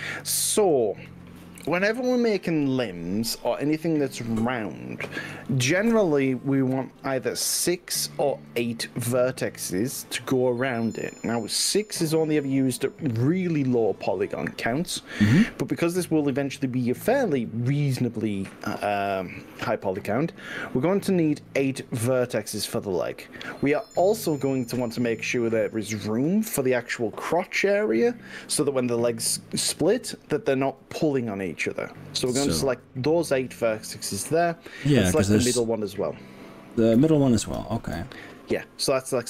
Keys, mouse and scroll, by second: 24.4 click, 26.0 shift+click, 26.6 shift+click, 27.2 shift+click, 28.0 shift+click, 28.6 shift+click, 29.8 shift+click, 31.4-35.2 middle drag, 36.4 middle click, 37.6 shift+click, 38.1-39.2 middle drag.